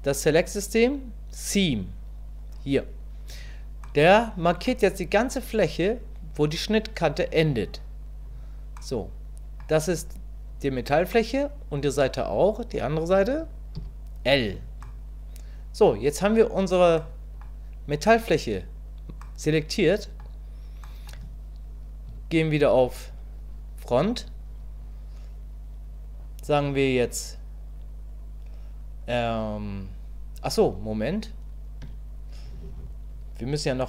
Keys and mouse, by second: 3.8 middle click, 8.9 middle click, 11.2 middle click, 14.9-15.9 middle drag, 17.1 middle click, 19.5 middle click, 21.0 middle click, 22.1 KP_1, 27.2-30.4 drag, 31.9 Tab.